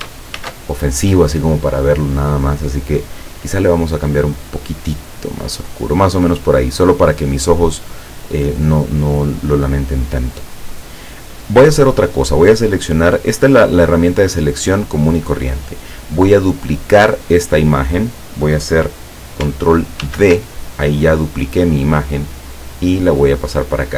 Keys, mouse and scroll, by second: 0.4 ctrl+shift+f, 4.2 click, 6.7 click, 11.7 click, 20.1 ctrl+d, 22.0-23.9 drag.